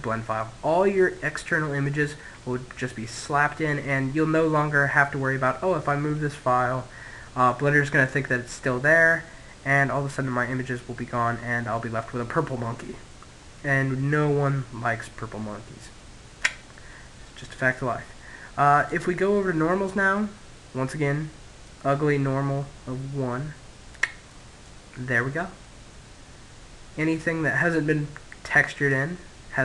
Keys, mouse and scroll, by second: 3.1-4.9 middle drag, 17.6 click, 19.3 middle click, 20.4 click, 23.2-26.1 middle drag, 27.6 click, 28.8 middle click, 29.2-29.6 middle drag.